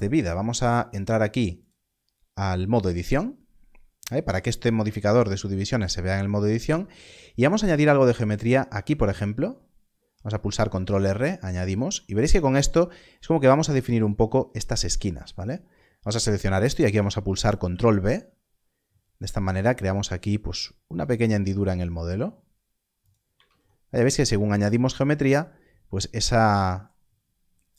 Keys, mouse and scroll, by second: 1.6 click, 6.1 click, 8.5 ctrl+r, 10.9 click, 15.3 alt+click, 17.6 ctrl+b, 21.0-22.9 scroll up 1, 23.0 click, 23.3 alt+a.